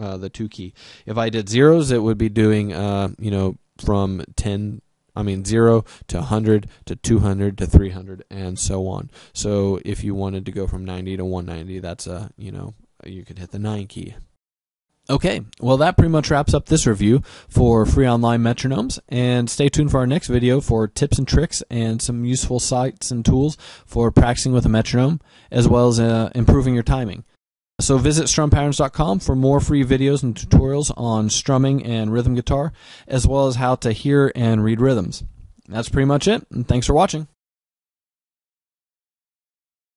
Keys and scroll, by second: 5.5 0.